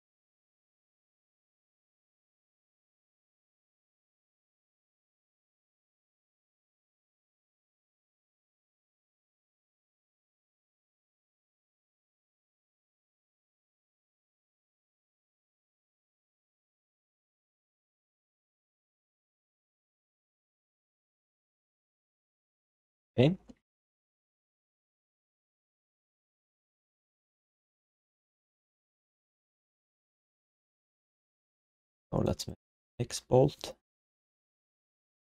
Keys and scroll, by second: 2.9 alt+shift+d, 3.1 ctrl+s, 3.7-4.6 typing, 7.8 g, 8.3 q, 12.0 alt+shift+d, 12.2 ctrl+s, 13.4 alt+q, 16.8 3, 18.8 ctrl+s, 22.9 ctrl+s, 33.0 ctrl+s.